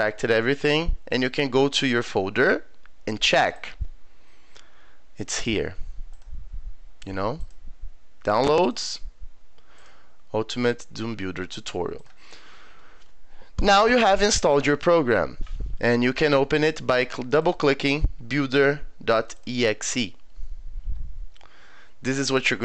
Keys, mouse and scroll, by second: 2.0 click, 3.4 click, 3.6 click, 6.1 click, 7.4 click, 8.6 click, 8.8 click, 9.8 click, 12.0 click, 17.4 click, 19.2 click, 19.4 click.